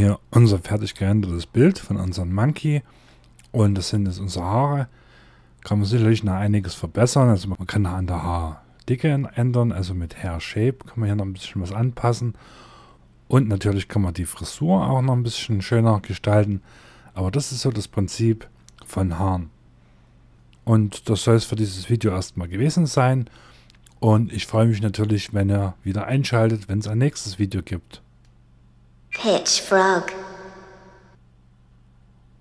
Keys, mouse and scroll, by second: 2.9-4.1 scroll up 1, 4.1-5.8 scroll down 1, 5.8-6.9 scroll up 1, 6.9-7.5 scroll down 1, 10.0-10.9 scroll up 1, 10.9 scroll down 1, 11.5-12.3 scroll up 1, 12.6 shift+middle click, 14.6-15.1 scroll down 1, 15.3 scroll up 1.